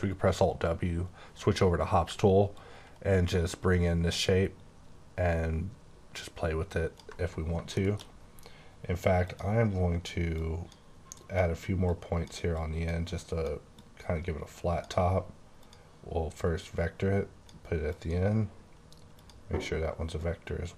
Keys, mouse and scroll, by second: 2.5 ctrl+click, 7.7 middle click, 9.2 click, 10.3 click, 11.8 click, 12.5 click, 13.0 double click, 13.8 click, 15.5 click, 16.9 click, 17.9 click, 19.2 click, 20.2 click.